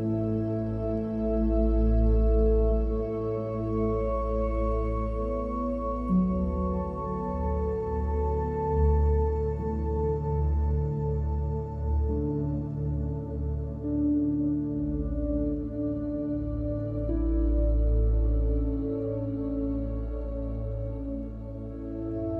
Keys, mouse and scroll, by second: 0.9 click, 2.2 click, 2.5-3.0 drag, 3.2 click, 4.0 ctrl+h, 4.2 g, 4.9 click, 5.3 shift+click, 5.4 g, 6.2 click, 6.8 ctrl+s, 6.9 click, 7.3 click, 7.9 click, 8.2 click, 8.2 g, 8.3 ctrl+s, 8.4 click, 9.3 middle click, 9.6 middle drag, 9.8 n, 10.5 shift+a, 11.1 click, 11.6 click, 12.2 click, 12.9 click, 13.1 ctrl+h, 13.9 drag, 14.3 click, 14.3 ctrl+h, 14.6 ctrl+h, 14.7 click, 14.8 ctrl+s, 14.9 click, 16.1 ctrl+s, 16.5 n, 16.7 click, 16.9-17.4 drag, 17.4 g, 17.7 drag, 18.1 alt+click, 18.4 alt+shift+click, 18.6 click, 19.1 click, 22.1 click.